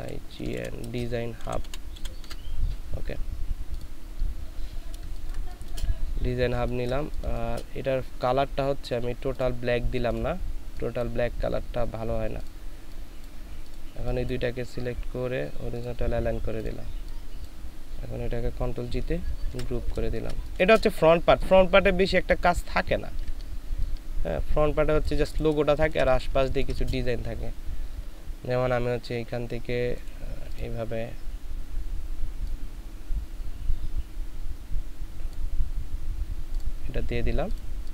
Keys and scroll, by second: 0.0-1.9 typing, 3.9-4.7 typing, 5.0 ctrl+space, 6.6 ctrl+space, 19.5 ctrl+g, 20.1 ctrl+space, 25.6 ctrl+alt+shift+space, 26.3 ctrl+alt+shift+space.